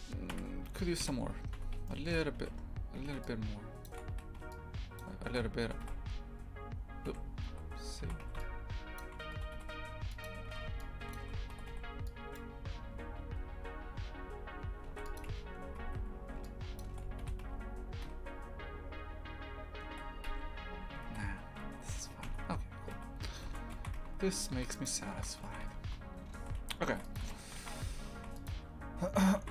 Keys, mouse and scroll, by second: 0.3 KP_3, 1.0 KP_Decimal, 1.5 Tab, 1.9 shift+middle click, 2.4 a, 2.5-3.0 scroll up 1, 3.0 a, 3.8 shift+click, 4.1 a, 5.0 shift+click, 5.7 g, 7.6 z, 9.0 shift+click, 9.4 g, 11.1 shift+click, 11.5 g, 14.9 ctrl+r, 15.8 a, 16.8 shift+click, 17.2 g, 21.0 ctrl+z, 21.3 ctrl+z, 22.2 Tab, 23.0 z, 23.7 shift+f, 29.4 shift+f.